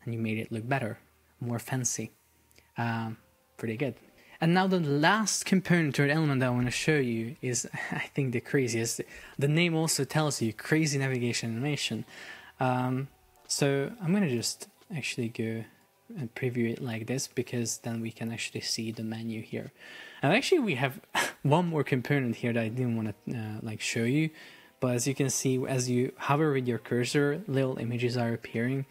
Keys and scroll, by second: 3.2 Escape, 12.8 super+p.